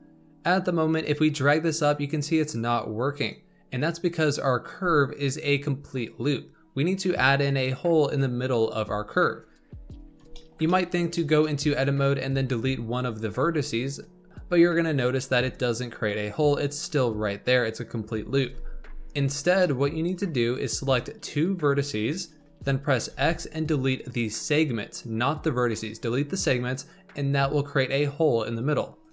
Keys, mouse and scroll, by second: 0.9-3.9 drag, 10.3-11.4 shift+middle drag, 11.4 scroll up 2, 11.7 click, 12.4 Tab, 13.2 click, 14.3 x, 18.3 ctrl+z, 19.2-19.5 scroll up 2, 19.5-20.0 shift+middle drag, 20.0-20.8 scroll up 2, 20.8 click, 21.9 shift+click, 23.0 x, 29.0 click.